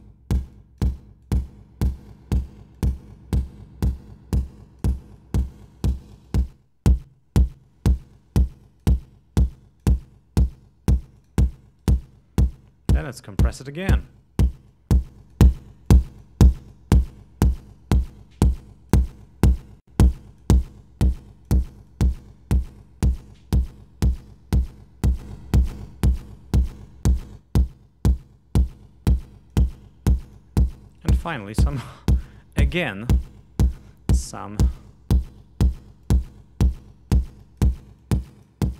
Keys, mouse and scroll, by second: 0.6-1.0 drag, 1.3-2.7 drag, 2.8-5.0 drag, 5.2-5.7 drag, 6.3-8.2 drag, 8.4-9.0 drag, 9.6-10.1 drag, 11.2 click, 11.8 right click, 13.4 click, 14.7-15.6 drag, 15.9-16.4 drag, 16.5-16.9 drag, 17.1-17.7 drag, 19.0 click, 19.2-20.6 drag, 21.9-23.3 drag, 25.1-26.9 drag, 27.2-29.7 drag, 30.2 click, 30.9 right click, 32.7-33.1 scroll down 2, 34.3 click, 36.0 click, 37.1 click, 38.0-38.6 drag.